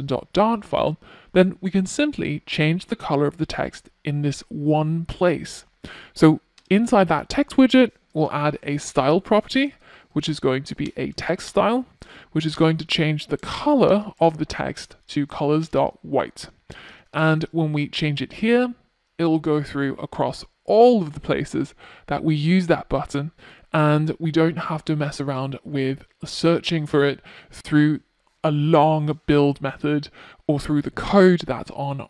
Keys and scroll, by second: 5.5 Return, 13.6 super+s.